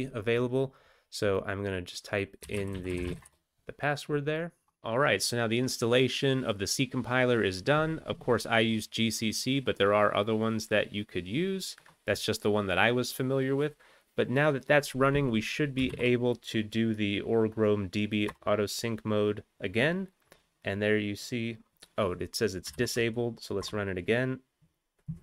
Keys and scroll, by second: 15.9 alt+x, 18.3 Return, 22.7 alt+x, 23.6 Return.